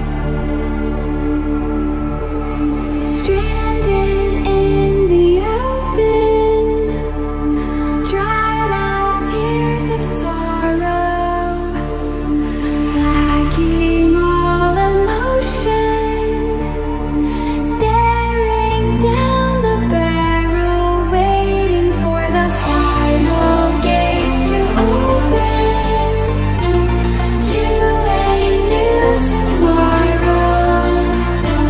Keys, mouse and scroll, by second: 1.0 alt+shift+click, 3.4 alt+shift+click, 5.2-5.7 alt+shift+scroll down 2, 6.2 scroll up 1, 8.9 Escape, 10.1 click, 12.6 alt+shift+scroll up 1, 13.9 shift+click, 15.1-15.7 alt+shift+scroll down 1, 17.0 shift+click, 18.6 Escape, 19.5-19.9 ctrl+scroll up 1, 22.3-22.8 ctrl+scroll up 1, 23.4 alt+shift+scroll up 1, 26.0 click, 30.0 shift+click, 31.1 ctrl+scroll up 1.